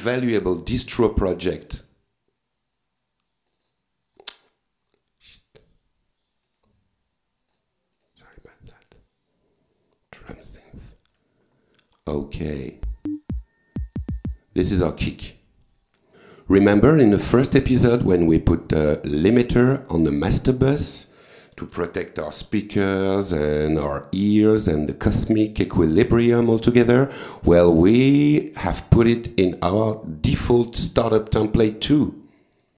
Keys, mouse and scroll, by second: 3.5 click, 5.4 click, 6.5 right click, 7.5 click, 8.0 right click, 8.4 click, 10.2 click, 12.9 click, 13.8 click, 15.3 click, 17.3 right click, 18.1 click, 19.7-20.7 typing, 22.8 click, 24.8 click, 26.6 click, 32.5 click.